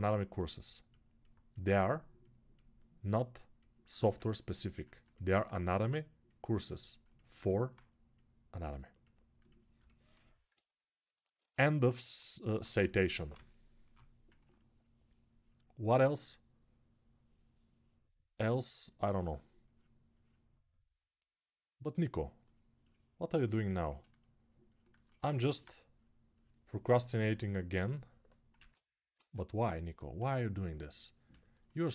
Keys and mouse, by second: 10.3-11.9 right drag, 11.9-26.5 alt+shift+drag, 13.1 [, 13.6 [, 28.3 ctrl+z, 28.9 ctrl+z, 28.9-31.9 ctrl+drag.